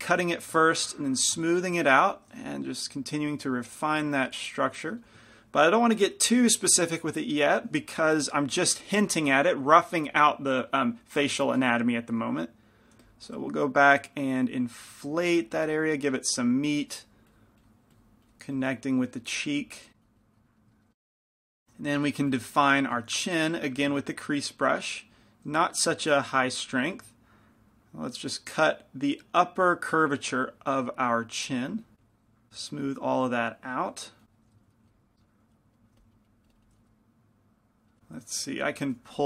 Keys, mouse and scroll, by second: 0.7 f, 1.7 shift+f, 2.5 f, 3.1-6.6 drag, 5.1 f, 8.8 i, 13.1 f, 13.6-19.3 drag, 19.4-21.1 drag, 20.7 middle click, 21.8 shift+c, 21.8 shift+f, 22.8 f, 24.2-25.7 drag, 24.4 f, 25.7 f, 26.3 shift+f, 27.6-33.3 drag, 34.3-35.8 drag, 34.5 middle click, 35.1 ctrl+z, 36.0 f, 36.2-37.4 drag, 37.9 middle click, 39.1 g, 39.1 f.